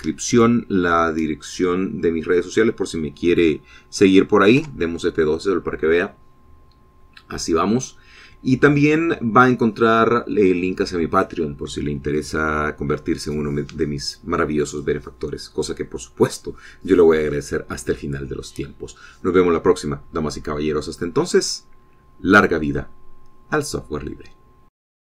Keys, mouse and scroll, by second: 6.2 F12.